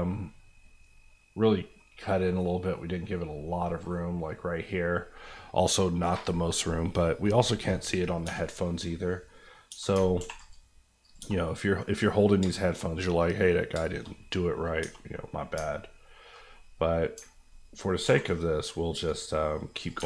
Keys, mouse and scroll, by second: 1.4 middle click, 1.9 scroll up 1, 2.2 middle click, 3.0 scroll up 1, 3.6 middle click, 8.2 Tab, 8.4 middle click, 9.0 scroll down 1, 9.2 middle click, 9.7 Tab, 10.2 ctrl+r, 10.4 click, 11.2 Tab, 11.4 middle click, 12.1-13.0 scroll down 3, 12.5 shift+middle click, 12.7 middle click, 13.0 middle click, 13.8 shift+middle click, 14.0 middle click, 14.1 scroll up 1, 14.5 middle click, 14.8 Tab, 15.1 middle click, 15.5 alt+middle click, 16.4 middle click, 17.2 ctrl+middle click, 18.0 ctrl+r, 18.9 click, 20.0 Tab.